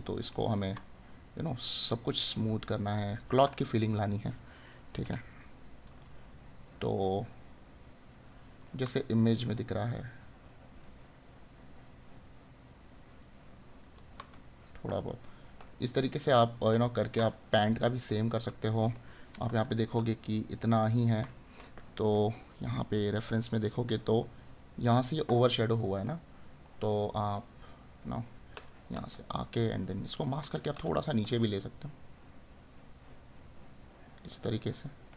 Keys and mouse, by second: 1.6 right click, 3.6 right click, 5.5 right click, 8.5 right click, 24.4 right click, 28.5 right click, 30.8 right click.